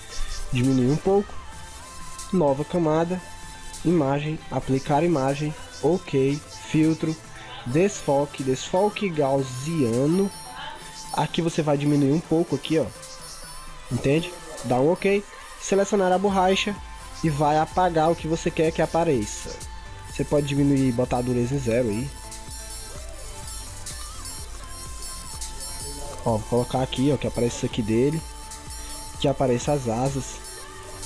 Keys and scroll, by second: 19.8 ctrl+z.